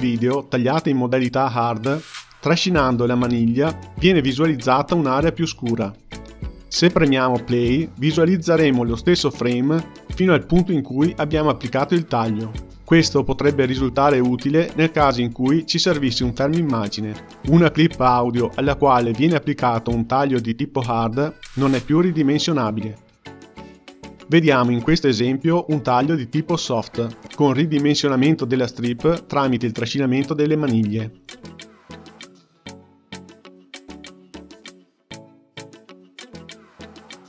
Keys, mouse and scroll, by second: 1.2 g, 3.5 click, 4.1-9.1 drag, 13.7 click, 14.3-18.9 drag, 19.5-22.5 drag, 23.0 click, 23.6-28.9 drag, 30.8 k, 31.9-34.8 drag, 36.8 click, 37.0 drag.